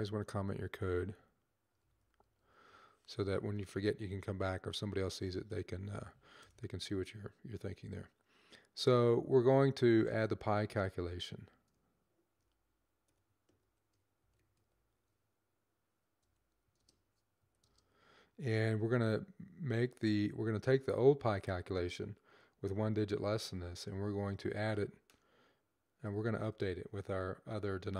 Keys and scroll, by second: 1.4-3.1 typing, 11.2-14.9 typing, 16.1 typing, 17.3 typing, 24.0-24.7 typing, 25.9-26.3 typing.